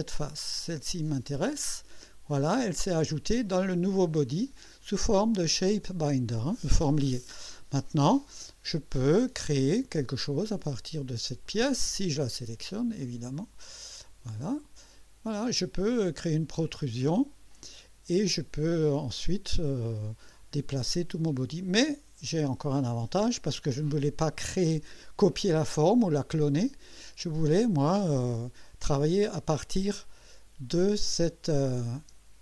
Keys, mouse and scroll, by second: 1.1 click, 10.2 click, 11.5 click, 13.0 click, 14.3 click, 17.5 click, 18.3-20.4 drag, 23.7-24.4 drag, 30.0 click, 32.0 space.